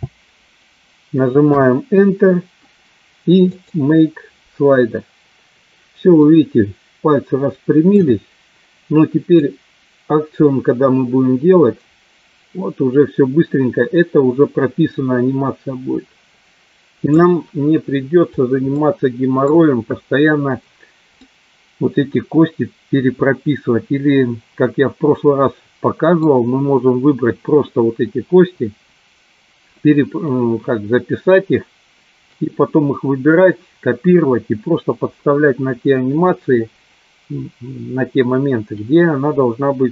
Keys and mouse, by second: 3.5 click, 6.4-8.0 middle drag, 9.4-17.3 drag, 18.8 middle click, 21.3-26.3 middle drag.